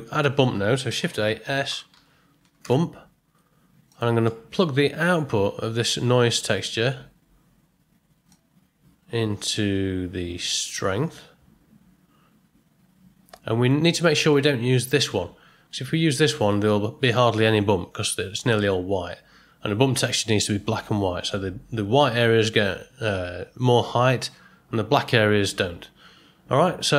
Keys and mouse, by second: 0.9 shift+a, 4.3 middle click, 8.4-13.6 drag, 14.2 click.